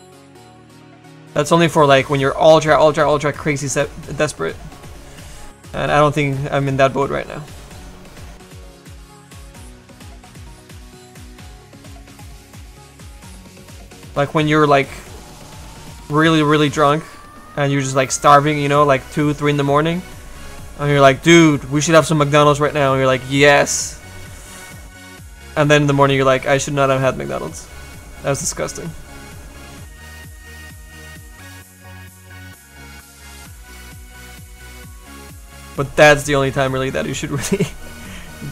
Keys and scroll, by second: 3.6 s, 5.2 s, 5.6 s, 25.6 s.